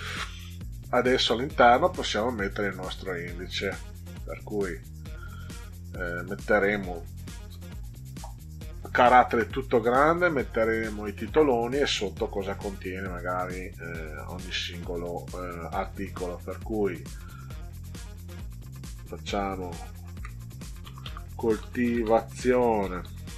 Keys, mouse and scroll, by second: 2.3-2.7 scroll up 4, 3.6 click, 3.9 click, 9.3 Caps_Lock, 12.7 middle click, 12.8 middle click, 13.6 middle click, 16.3 middle click, 20.3-23.3 typing.